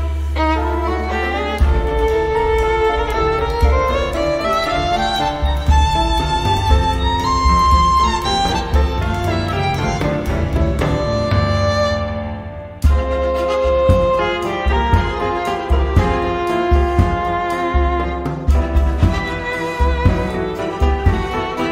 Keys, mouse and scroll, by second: 1.1 click, 1.9 click, 2.4 click, 3.6-4.0 scroll down 1, 4.9 click, 5.8 1, 6.2 5, 6.8 0, 7.4-8.7 drag, 9.2 click, 9.6 click, 10.2-10.6 scroll down 2, 10.8-11.4 scroll up 4, 12.0 scroll down 2, 13.0-14.1 drag, 19.4 click, 20.9-21.7 drag.